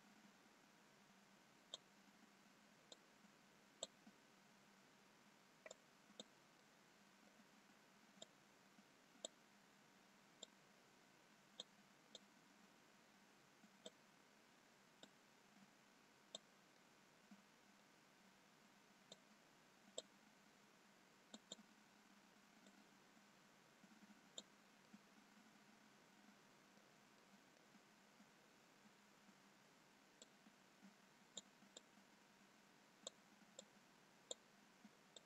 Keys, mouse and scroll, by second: 3.0 click, 6.3 click, 6.7 middle click, 8.6 click, 10.9 click, 15.2 click, 17.1 middle click, 18.8 scroll up 1, 19.7 click, 21.6 click, 25.2 click, 25.2 middle click, 27.3 middle click, 28.0 scroll down 2, 30.2 scroll down 2, 30.3 click, 32.4 click.